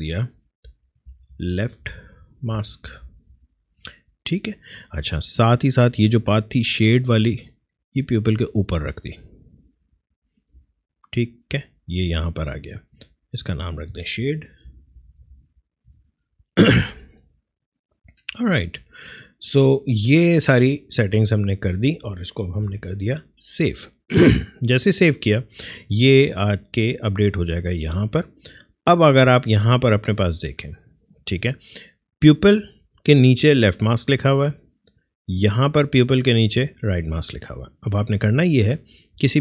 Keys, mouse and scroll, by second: 0.4-3.5 typing, 5.8-10.6 drag, 10.6 space, 10.8 click, 11.1 space, 13.2 click, 14.0-15.6 typing, 15.9 Return, 20.4 click, 22.6 ctrl+s, 26.4 click, 32.3 click, 35.8 click.